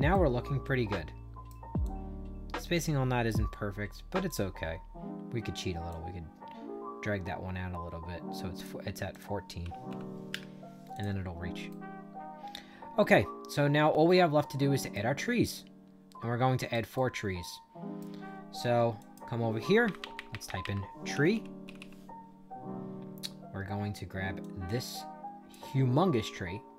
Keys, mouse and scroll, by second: 0.0-1.4 right drag, 1.7-3.2 drag, 4.2 click, 5.8-8.5 drag, 9.0 click, 9.5 1, 9.8 4, 10.2 Return, 10.8 click, 11.6-14.8 right drag, 15.3-16.6 shift+right drag, 16.9-17.9 right drag, 18.9 click, 20.8-22.2 typing, 24.3-25.4 drag.